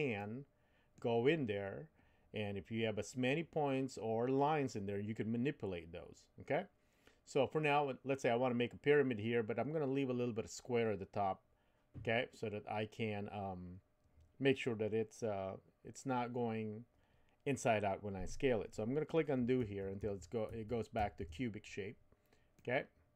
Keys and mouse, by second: 0.2 middle click, 19.6 super+z, 20.0 super+z, 20.5 super+z, 21.0 super+z, 22.5-23.1 middle drag.